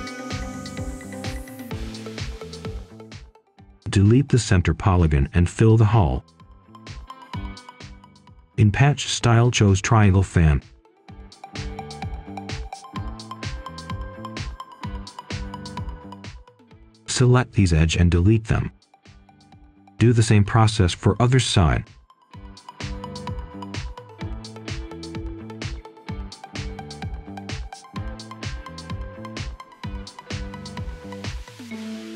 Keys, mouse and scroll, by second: 0.5 right click, 1.8 scroll down 2, 2.1-2.9 scroll up 1, 2.9 Tab, 4.0-4.6 scroll up 1, 4.8 ctrl+shift+click, 5.5 Delete, 6.4 ctrl+shift+click, 7.9 Return, 10.6 click, 11.5 Escape, 11.9 scroll up 1, 12.7 ctrl+shift+click, 17.1 ctrl+shift+Delete, 17.8-19.3 scroll down 1, 19.3 click, 19.8 right click, 20.7-21.6 scroll up 1, 22.3 ctrl+shift+click, 23.2 Delete, 24.0 ctrl+shift+click, 25.7 Return, 27.2 click, 28.0 Escape, 28.9 ctrl+shift+click, 30.8 Delete, 31.8-32.1 scroll down 1.